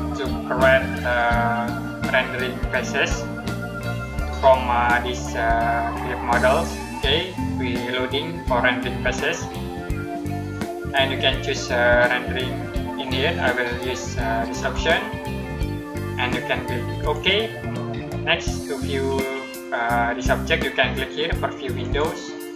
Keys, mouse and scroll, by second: 14.5 click, 21.7 click.